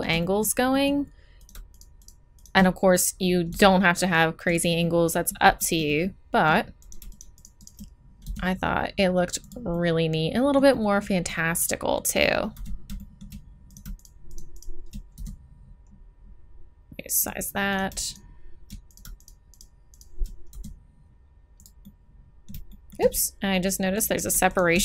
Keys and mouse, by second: 3.5 s, 4.8 click, 4.8 middle click, 4.9 click, 5.0 middle click, 8.2 s, 12.5 z, 14.7-15.9 drag, 15.1 s, 15.9 middle click, 16.3 middle click, 17.7-19.6 drag, 20.5 s, 24.7 right click.